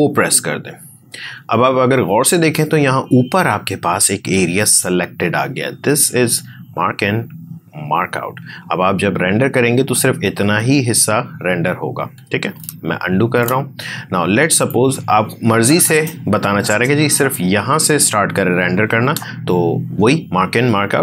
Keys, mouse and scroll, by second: 13.1 ctrl+z, 14.6-21.0 drag.